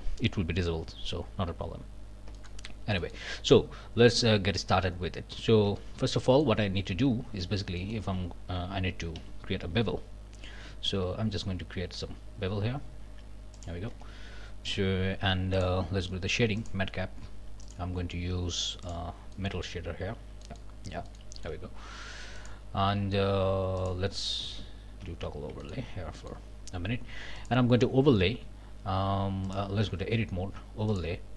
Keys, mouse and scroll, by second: 1.1-1.7 scroll up 2, 2.3 middle click, 2.6 scroll up 1, 3.0 shift+middle click, 3.3 shift+scroll down 1, 4.8 scroll down 1, 5.7 Tab, 6.2-6.6 scroll up 1, 6.9 scroll up 1, 7.4 alt+a, 7.8-8.1 alt+scroll up 1, 9.2 a, 9.7 ctrl+a, 10.5 ctrl+b, 13.5 click, 13.9 Tab, 15.5 click, 16.6 click, 17.6 click, 18.8 click, 19.3-20.8 drag, 20.5 z, 20.8-21.4 scroll up 2, 21.1 shift+click, 21.4 shift+click, 22.4 click, 23.8 click, 24.2 scroll down 2, 24.6 z, 25.3-26.1 scroll down 2, 25.6 shift+click, 26.2 shift+click, 27.4 click, 29.5 click, 29.8 Tab, 30.9 click.